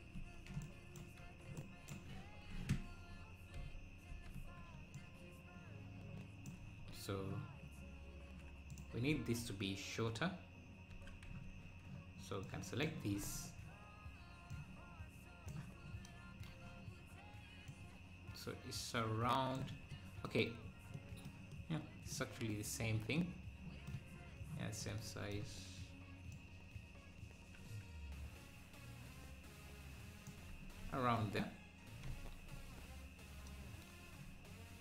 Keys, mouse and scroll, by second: 1.6 ctrl+Right, 4.9 ctrl+Left, 4.9-7.9 drag, 7.9 scroll up 2, 8.8 click, 11.0 Tab, 12.9 click, 13.3 z, 14.6 click, 21.7 click, 26.4 click, 30.5 Tab, 30.8 `, 31.3-31.7 scroll up 5, 32.5 Tab.